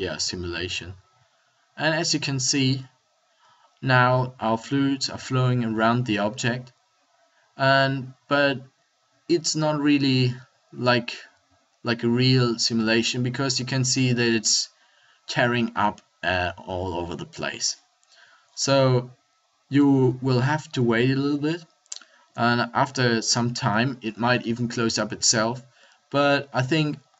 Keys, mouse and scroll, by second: 21.8 middle click.